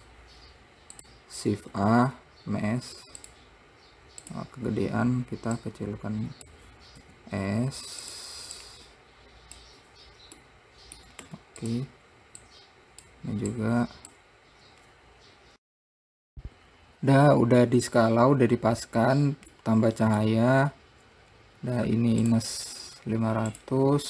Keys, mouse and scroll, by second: 0.0-0.3 scroll up 1, 0.3 click, 1.3 click, 2.1 shift+a, 4.6 click, 5.3-6.0 scroll down 1, 6.0 click, 7.4 s, 9.0 click, 10.8 middle click, 11.7 `, 12.8 click, 14.0 click, 16.3 click, 17.9 scroll down 2, 18.4-19.1 scroll up 1, 19.1-19.9 scroll down 1, 19.9-22.5 middle drag, 22.5 click, 23.8-24.0 drag.